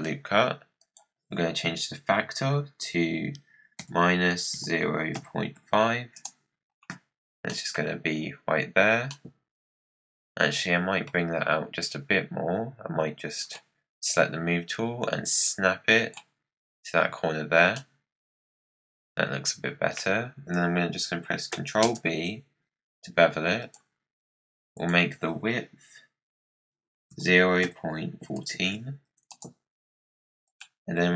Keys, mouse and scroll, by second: 7.0 scroll up 4, 7.4 middle click, 7.7 scroll down 1, 9.0-12.1 middle drag, 13.4-14.7 drag, 17.7-20.8 middle drag, 21.8 ctrl+b, 24.7-27.8 drag, 30.4 click.